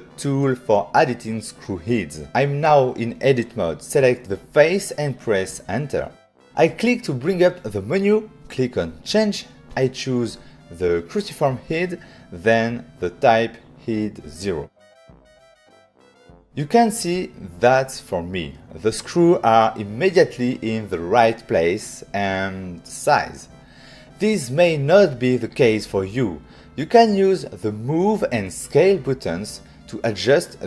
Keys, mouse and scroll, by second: 2.4 click, 4.4 Return, 6.5 click, 9.0 click, 10.4 click, 13.3 click.